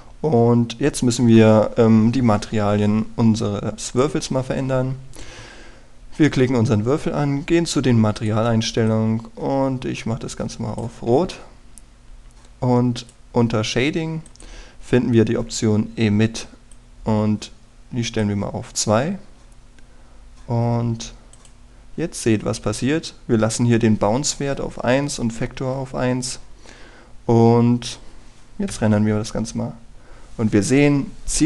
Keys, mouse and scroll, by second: 0.3 right click, 0.9-1.8 scroll up 1, 1.9 scroll up 1, 4.9 click, 6.9-9.2 scroll down 1, 9.2-11.8 drag, 12.5-14.0 scroll down 1, 14.0-19.8 drag, 20.2-21.2 scroll up 1, 22.3 click, 27.1-27.6 scroll up 1, 27.6-29.7 scroll down 1, 29.7 F12.